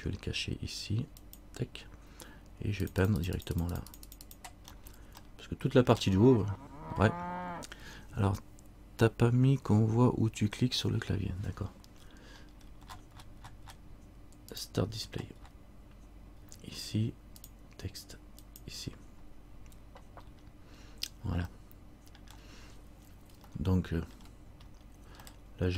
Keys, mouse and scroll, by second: 20.4-20.9 scroll down 1, 21.1-21.6 scroll down 1, 21.8 scroll up 1, 22.4 scroll down 1, 23.7 shift+middle click, 24.8-25.3 shift+scroll down 1, 25.3-25.7 scroll up 2, 25.4 middle click.